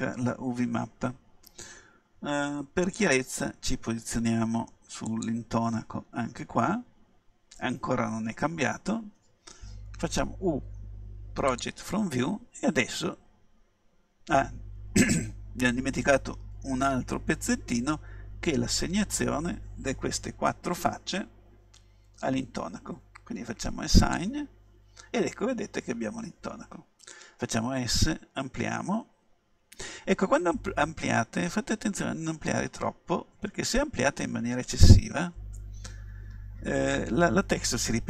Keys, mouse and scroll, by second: 3.1-4.9 drag, 6.0-8.0 middle drag, 8.8 right click, 9.5 right click, 10.4 u, 24.1-26.0 drag, 27.5 s.